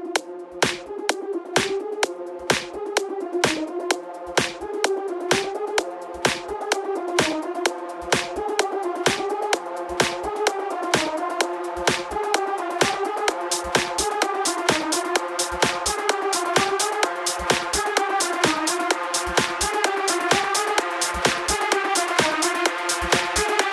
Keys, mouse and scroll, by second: 0.0 click, 1.0 click, 1.8 z, 3.3 KP_1, 3.9-4.6 scroll up 2, 4.6-9.8 drag, 12.3 KP_7, 13.3 s, 14.6 KP_1, 15.5-16.5 scroll down 2, 16.5 click, 17.6 s, 20.7 click, 22.1 s, 23.3 click.